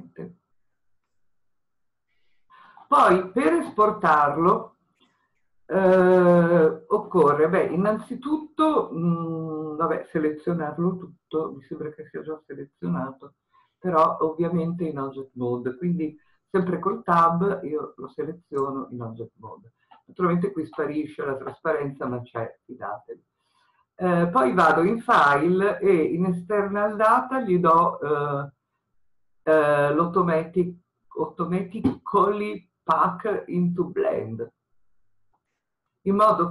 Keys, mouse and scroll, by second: 16.8 Tab.